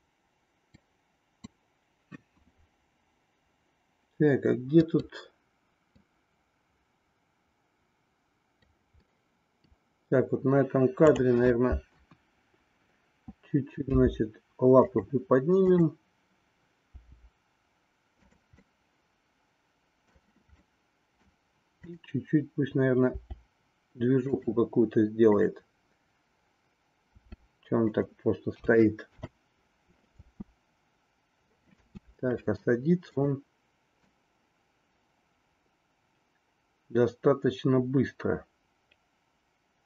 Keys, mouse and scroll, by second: 0.7 click, 4.9 click, 6.0-8.7 drag, 9.1 middle click, 11.1-12.1 drag, 12.2 KP_1, 13.8 g, 18.6-20.2 middle drag, 20.6 middle click, 23.2 r, 25.4-26.7 drag, 27.1 r, 28.6 a, 29.1 i, 30.2 space, 33.1 click, 34.0-39.8 drag.